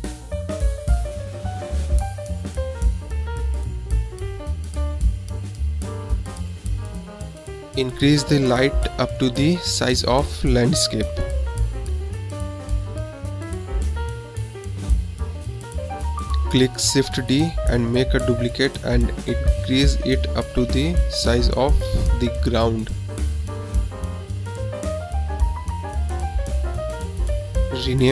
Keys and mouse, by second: 0.0 click, 1.1 click, 1.9 click, 3.3-4.8 drag, 5.2-6.3 drag, 6.9 KP_7, 8.5 s, 17.4 shift+d, 19.6 s, 27.0 click, 27.8 click.